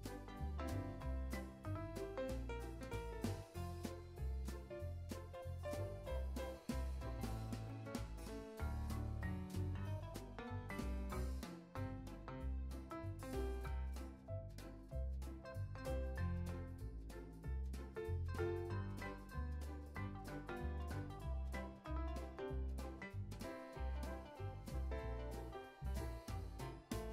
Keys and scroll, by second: 4.0 z, 4.6 c, 5.3 c, 6.2 c, 6.5 super+s, 7.2 space, 9.7 space, 12.3 Tab, 24.2 alt+shift+w.